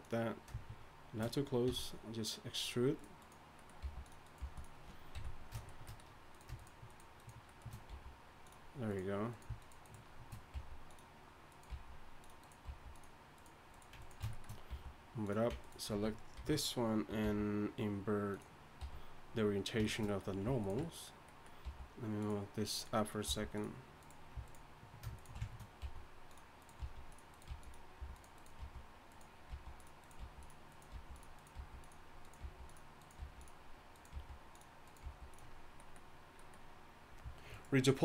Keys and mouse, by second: 1.7 e, 3.8 g, 4.4 g, 5.1 ,, 7.0 shift+right click, 7.9 g, 9.7 shift+right click, 10.5 g, 11.7 g, 12.7 g, 14.7 g, 16.4 ctrl+l, 17.2 t, 18.4 ctrl+l, 18.4 t, 18.8 t, 21.6 g, 23.3 g, 25.8 g, 26.8 g, 27.5 g, 28.0 g, 29.5-35.0 typing, 37.5-38.0 middle drag.